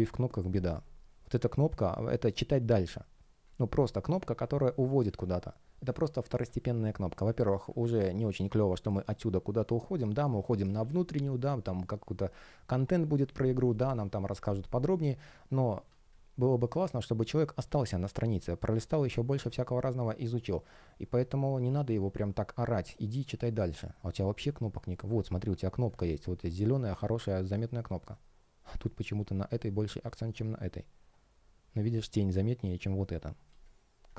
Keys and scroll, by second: 3.1 space, 4.4 space, 15.7 space, 33.3 space.